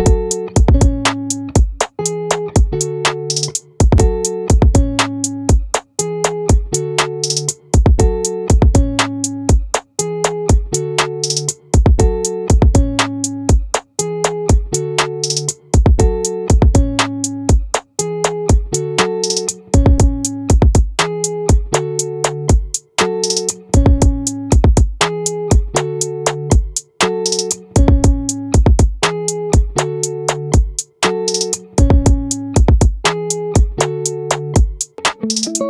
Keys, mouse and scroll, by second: 4.7 middle click, 7.5-9.1 right drag, 9.1-10.1 middle drag, 10.1-13.5 right drag, 13.5-15.2 drag, 15.2 middle click, 15.6-19.4 right drag, 19.4 middle click, 20.2-22.4 right drag, 29.6-31.2 drag, 31.2-32.6 middle drag, 35.0 middle click, 35.3 middle click.